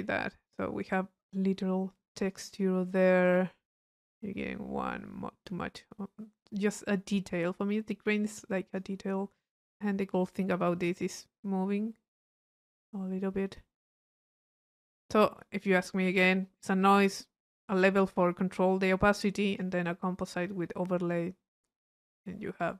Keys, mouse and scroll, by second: 1.9 click, 3.2 click, 4.0-9.0 drag, 9.6-13.0 middle drag, 9.6-10.7 scroll up 1, 13.2-15.0 middle drag, 15.3-16.4 middle drag, 16.6 click, 17.5 click, 19.5 click, 20.9-22.6 middle drag, 22.6 click.